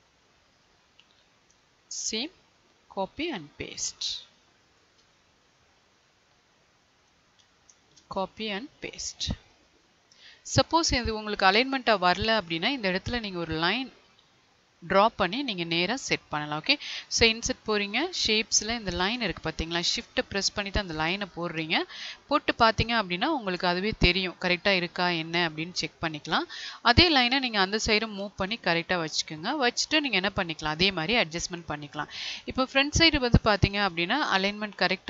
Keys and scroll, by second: 2.9 ctrl+c, 3.1 ctrl+v, 8.1 ctrl+v, 13.8 Left, 25.8 Right, 31.3 Left.